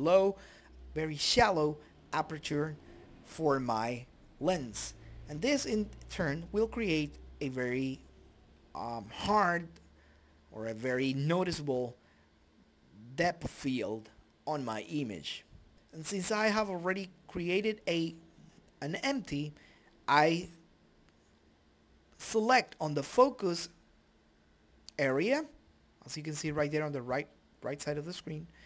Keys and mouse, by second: 2.7 right click, 3.6 click, 5.1 shift+F3, 6.0 shift+F3, 6.5 shift+F5, 9.0-14.0 drag, 9.0 KP_Decimal, 11.9-13.2 right drag, 13.9 middle click, 14.5 right click, 15.3 middle click, 15.7 click, 17.1 ctrl+z, 17.5 right click, 19.8-20.8 middle drag, 20.4 right click, 20.8 click, 21.4 shift+a.